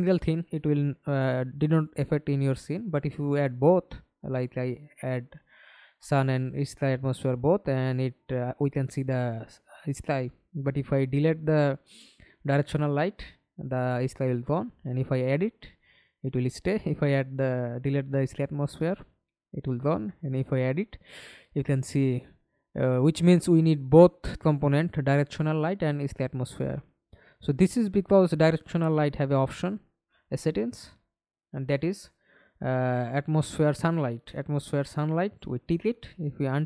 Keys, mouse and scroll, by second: 1.4-2.3 typing, 4.8 alt+click, 5.8 alt+middle click, 7.9 Delete, 11.9-13.4 typing, 14.9-16.3 scroll up 3, 17.9-19.1 typing, 22.4 middle click, 23.2-24.7 scroll up 1, 24.7-28.2 scroll down 31, 28.2-29.2 scroll down 1, 29.2-32.6 scroll down 25, 32.6-33.6 scroll down 2, 33.6-35.8 scroll down 1.